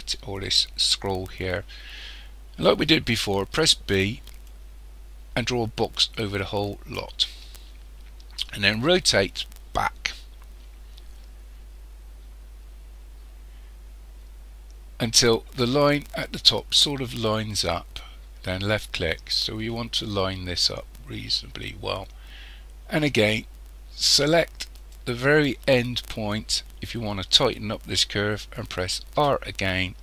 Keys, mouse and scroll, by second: 3.5 b, 8.9 r, 23.2-23.7 scroll up 1, 23.7-24.8 scroll down 1, 24.8 click, 29.2 r.